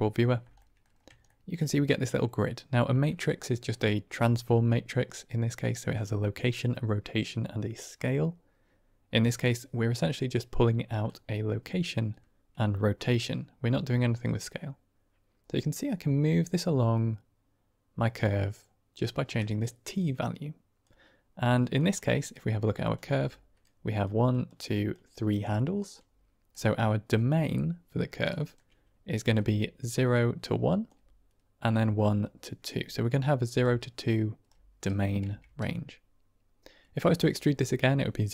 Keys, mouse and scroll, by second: 0.5 middle drag, 1.1 shift+drag, 10.9-19.2 shift+drag, 19.9-20.7 drag, 21.6 middle drag, 22.1 click, 22.7 click, 23.0 Tab, 23.7 click, 24.2 click, 24.8 click, 25.4 middle click, 28.3 shift+click, 29.4-30.6 d, 29.5 click, 30.6 click, 30.8 d, 31.9-34.4 typing, 32.1 click, 33.5 right click, 35.1 Tab.